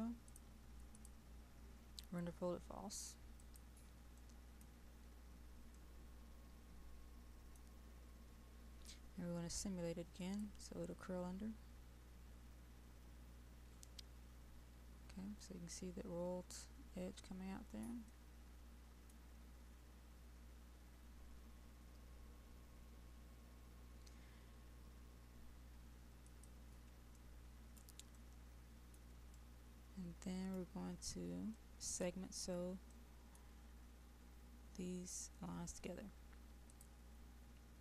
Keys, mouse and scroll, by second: 4.4 middle click, 5.0-5.8 scroll down 1, 5.8-8.6 middle drag, 10.1 click, 18.1 middle click, 26.3 click, 27.2 right click, 28.2 middle click, 29.5-30.7 right drag, 31.6 middle click, 32.4-32.9 scroll down 1, 32.9 middle click, 33.8-36.6 scroll down 1, 36.6 click.